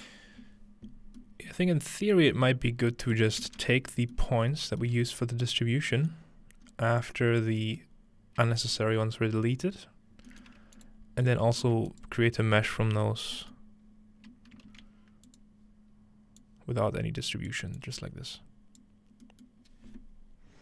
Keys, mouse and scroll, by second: 1.2 middle click, 2.3 middle click, 3.2 middle click, 3.4-5.5 ctrl+middle drag, 3.8-6.3 scroll down 3, 6.3-10.3 scroll up 1, 7.0 click, 10.8 click, 11.9 click, 13.8-14.6 scroll up 2, 14.6-15.3 shift+scroll up 1, 14.7 shift+d, 15.3 click, 16.4-17.5 drag, 17.8-18.8 drag, 19.3 click, 19.3-20.6 middle drag.